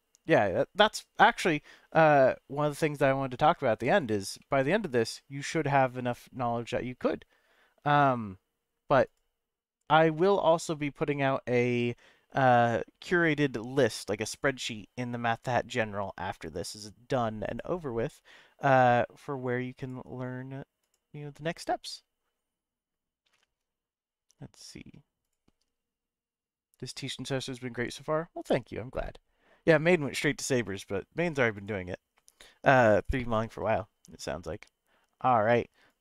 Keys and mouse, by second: 3.9 click, 4.4-6.5 middle drag, 9.0 click.